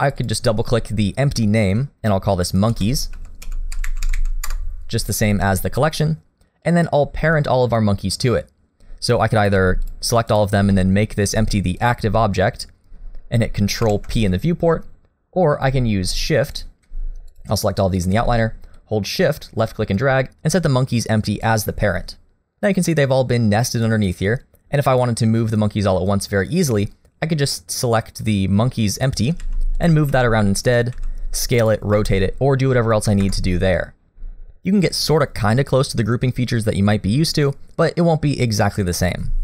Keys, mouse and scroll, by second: 0.1 click, 0.2 click, 9.4 click, 9.9 shift+click, 10.3 shift+click, 10.7 middle click, 11.8 shift+click, 12.2 middle click, 13.8 ctrl+p, 16.5 click, 17.3 shift+click, 18.8 click, 24.1 click, 26.7 click, 29.4 g, 30.1 g, 31.0 s, 31.9 r.